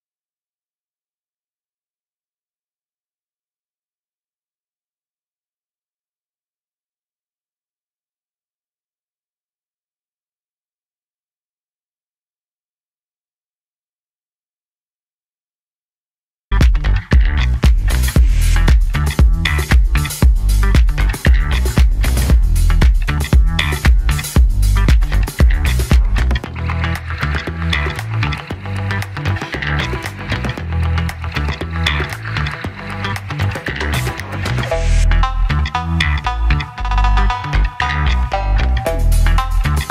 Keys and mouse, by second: 10.8 click, 22.8 click, 28.8 right click, 30.0 click, 31.3 click, 34.1 click.